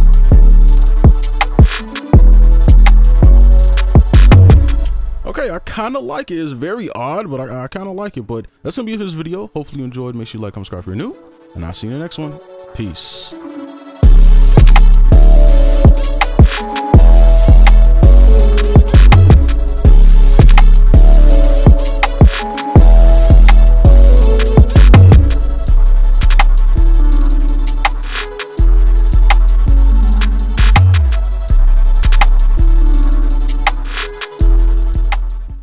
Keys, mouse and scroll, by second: 4.8 space.